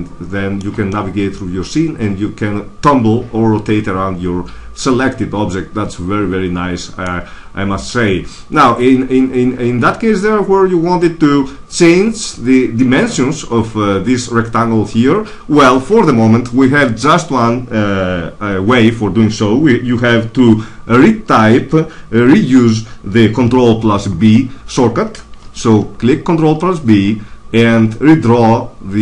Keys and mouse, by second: 2.0 middle click, 3.9 middle click, 8.9 middle click, 24.1 ctrl+n, 25.3 ctrl+b.